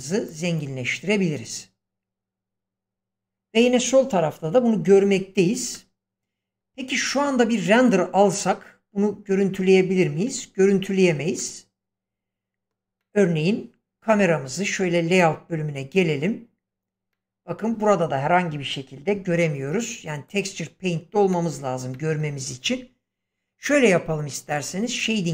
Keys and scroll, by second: 10.2 Escape.